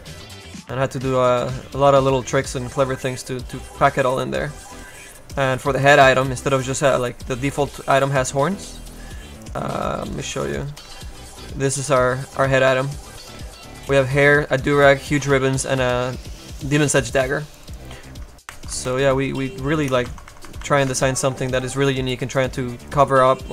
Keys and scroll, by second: 10.4 space, 10.9 a, 18.5 ctrl+z, 20.0 ctrl+z, 20.3 ctrl+z.